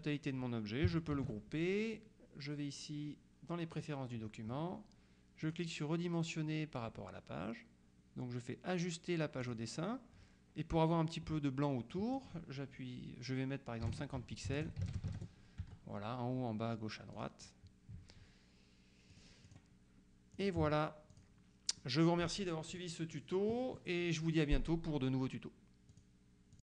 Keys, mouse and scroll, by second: 1.2 ctrl+g, 3.9 click, 5.5 click, 9.5 click, 12.0 click, 13.9 KP_5, 14.3 Tab, 14.5 KP_5, 14.8 Tab, 14.9 KP_5, 15.1 Tab, 15.2 KP_0, 15.7 Tab, 17.2 click, 19.2 click, 20.4 click, 21.2 click, 21.9 middle click, 22.8 click, 26.0 click.